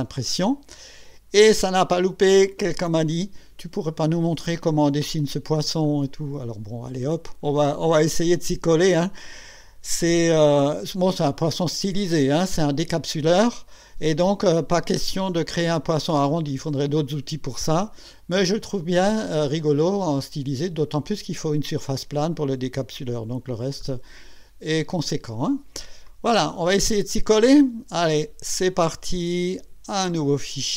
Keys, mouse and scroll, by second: 3.1-4.0 right drag, 5.8-9.6 drag, 11.0-14.6 drag, 17.5-20.9 drag, 22.4-23.4 drag, 23.8-25.9 drag, 26.1 click, 30.1 click.